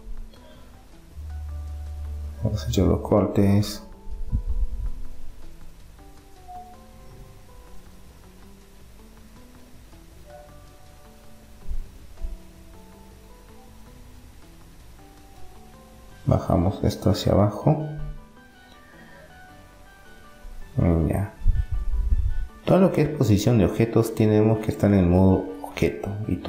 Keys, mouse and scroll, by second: 1.8 middle click, 2.8-4.5 right drag, 7.1-9.6 middle drag, 10.8-12.8 drag, 13.3 Tab, 13.8-15.1 middle drag, 15.1 click, 15.4 right click, 15.6-16.8 drag, 18.8-20.6 middle drag, 21.1 Tab, 21.9 Tab, 23.1-24.8 drag, 25.6 Tab.